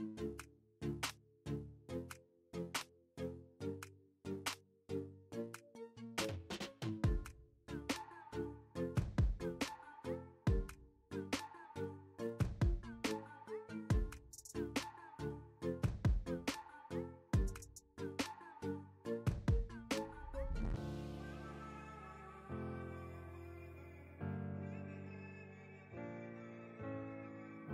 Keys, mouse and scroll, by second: 10.2 space, 10.3 click, 10.5-11.0 space, 11.0 space, 11.1 click, 12.7-14.4 drag, 17.0 click, 18.9 click, 19.8-20.4 alt+drag, 21.6-22.3 drag.